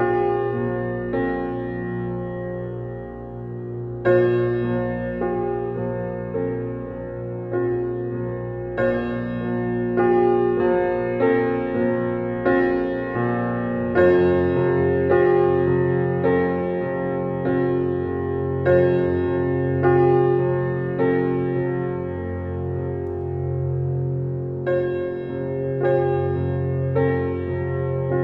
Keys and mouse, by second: 1.0-4.6 drag, 5.0 click, 6.5-8.8 drag, 10.0 click, 11.1 click, 12.1-13.3 drag, 14.6 ctrl+d, 15.9 click, 17.0 shift+Right, 17.6-18.7 shift+Right, 21.4 shift+Right, 23.3 click, 26.1 click, 27.2-28.2 drag.